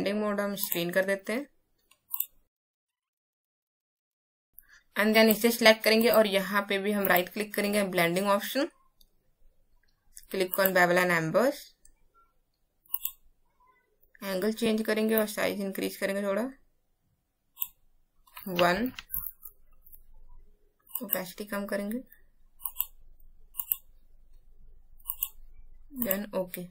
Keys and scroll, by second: 18.8 KP_1.